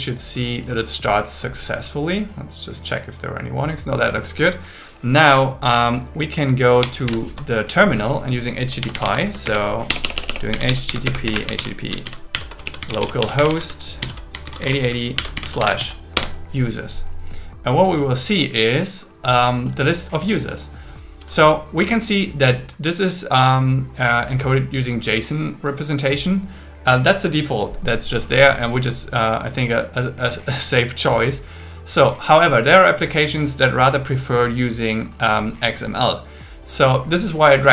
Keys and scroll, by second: 6.8 ctrl+Tab, 7.0 ctrl+Tab, 7.0 ctrl+t, 9.5 space, 9.9 BackSpace, 11.1 space, 12.3 shift+7, 14.0 shift+., 15.1 shift+7, 16.1 Return.